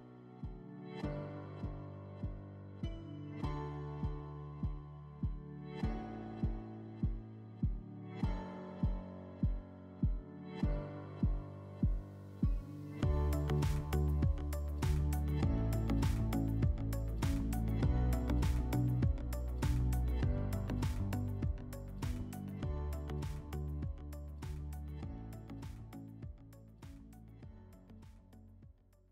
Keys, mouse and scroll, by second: 1.2 click, 2.7 click, 4.4 r, 7.7 shift+click, 8.3 w, 11.9 click.